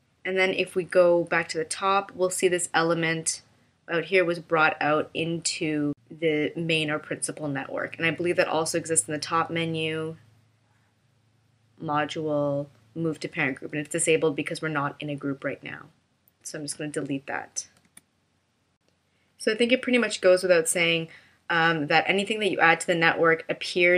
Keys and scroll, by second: 17.9 BackSpace.